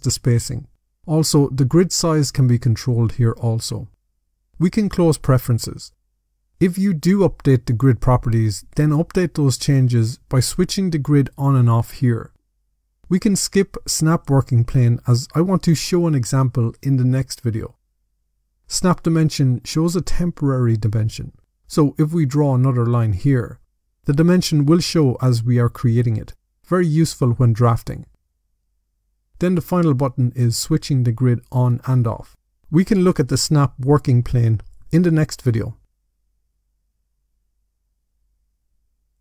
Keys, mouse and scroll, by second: 5.1 click, 8.2 click, 9.1 click, 10.1 click, 19.8 click, 21.5 click, 22.4 click, 22.6 click, 26.5 click, 29.1 click, 30.5 click, 31.5 click.